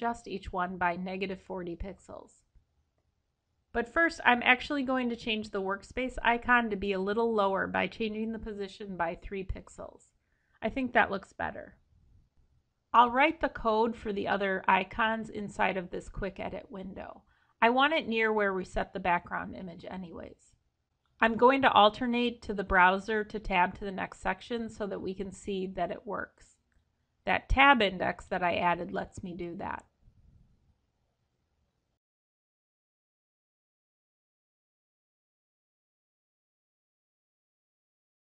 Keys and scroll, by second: 26.9 ctrl+Return.